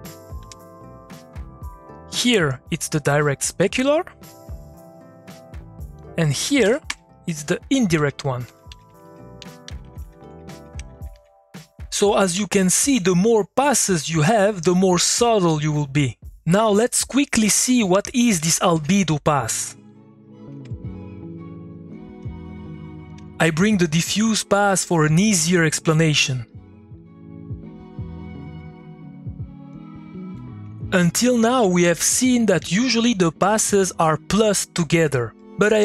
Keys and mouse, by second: 0.4 Return, 1.8-5.9 drag, 7.9 Left, 8.7 Up, 17.1 click, 18.3 ctrl+a, 19.9 click, 21.2 click, 22.1 ctrl+c, 22.5 click, 22.7 middle click, 23.1 click, 23.2 ctrl+middle click, 24.8-26.5 drag, 26.5 middle click, 26.9-29.4 drag, 29.7 middle click, 30.5-31.9 drag, 32.6 middle click, 33.2 click, 34.2 middle click.